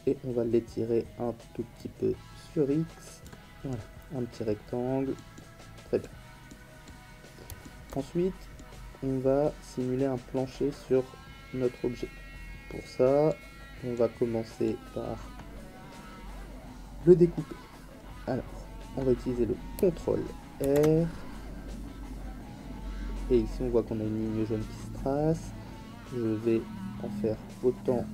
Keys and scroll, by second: 20.6 ctrl+r.